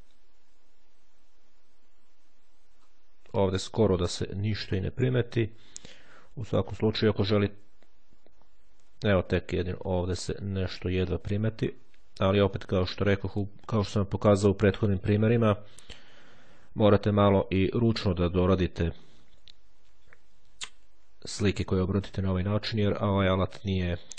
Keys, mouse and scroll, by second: 2.6 scroll down 2, 5.0-5.5 ctrl+scroll up 2, 6.4-7.0 shift+scroll up 2, 8.6-9.4 ctrl+scroll up 2, 11.4-12.0 scroll up 1, 12.2-12.7 scroll down 2, 14.5-15.2 ctrl+scroll down 2, 15.8-16.9 shift+scroll down 2, 19.6-20.2 ctrl+scroll up 2, 21.4-22.5 scroll down 1, 22.5-23.5 scroll down 1.